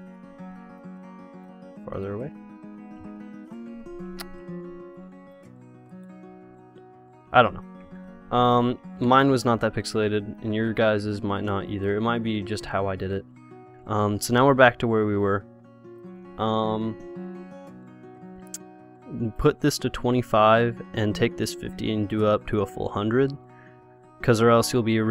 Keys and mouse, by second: 3.0 click, 4.4 Escape, 5.2-8.1 drag, 8.1 KP_0, 9.3 ctrl+z, 9.7 ctrl+z, 10.0 ctrl+z, 10.4 ctrl+z, 10.8 ctrl+z, 11.2 ctrl+z, 12.0 ctrl+z, 12.6 ctrl+z, 13.0 ctrl+z, 13.4 ctrl+z, 16.2-21.6 drag, 21.8-23.4 drag.